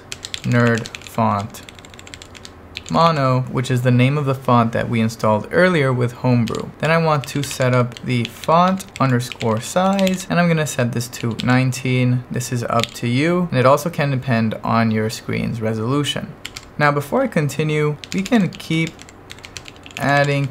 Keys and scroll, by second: 0.0-3.5 typing, 6.2-13.4 typing, 16.5 o, 16.6 Return, 17.9-20.5 typing.